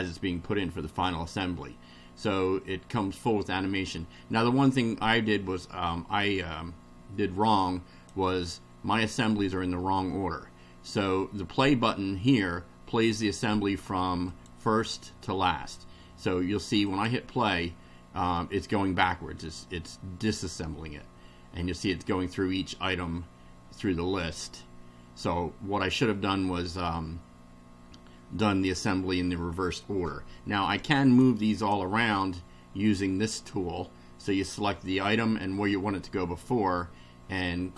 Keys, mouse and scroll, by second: 7.5-8.2 drag, 14.3 click, 16.9 click, 31.2 click, 31.6 click.